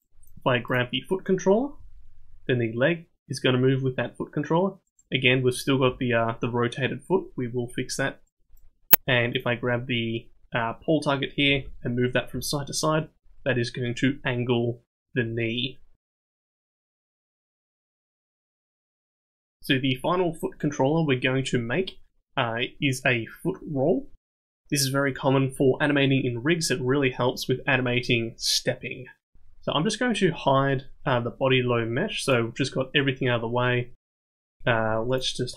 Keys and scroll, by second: 1.8 g, 5.8 g, 11.4 g, 34.8 ctrl+Tab.